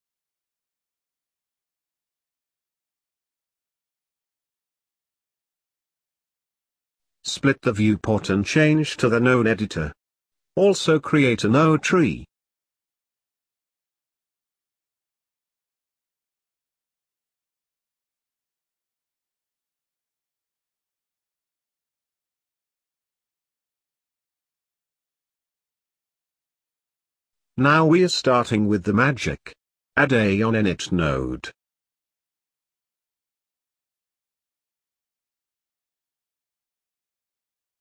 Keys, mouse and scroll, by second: 3.9-21.1 drag, 21.1 t, 24.6-37.8 drag.